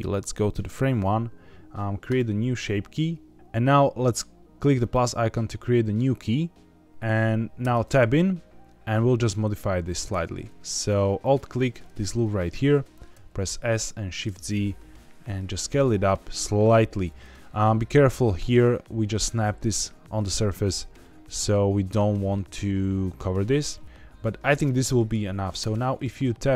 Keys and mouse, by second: 0.0 click, 2.0 click, 4.8 click, 7.5 Tab, 10.0 2, 13.0 s, 13.8 shift+z, 17.0 click, 18.7 middle click, 20.9 middle click, 23.6-25.0 middle drag, 25.5 Tab.